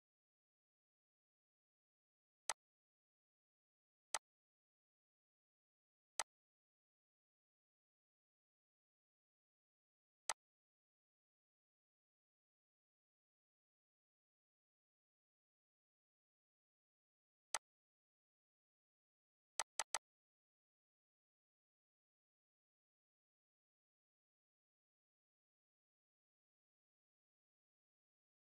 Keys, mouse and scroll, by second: 9.0 right click, 9.0 typing, 10.3 click, 17.5 click, 19.6 click, 22.9 click, 23.3 shift+g, 26.1-26.8 typing, 28.0-28.5 typing.